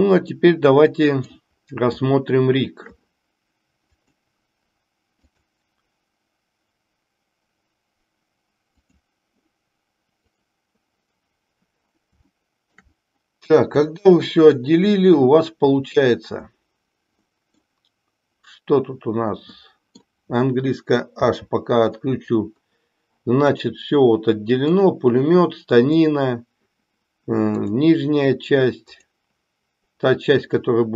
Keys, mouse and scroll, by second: 0.4-1.4 middle drag, 2.0-2.9 shift+middle drag, 3.9-4.8 drag, 5.2-10.8 drag, 12.2-12.9 shift+middle drag, 13.9-14.6 middle drag, 17.2-17.8 middle drag, 19.5 middle click, 21.2 h, 23.5 click, 24.8 click, 27.5 click, 28.8 click.